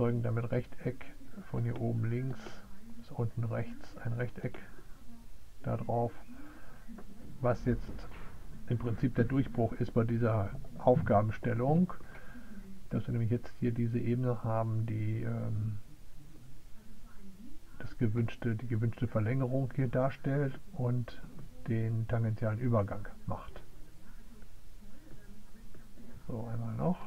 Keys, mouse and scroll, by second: 0.0 click, 2.7 click, 3.9 click.